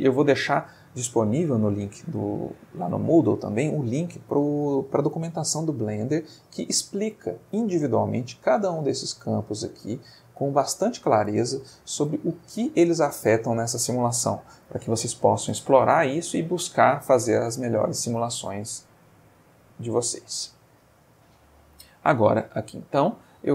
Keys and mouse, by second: 10.1 middle click, 18.4-20.4 middle drag, 22.1 click.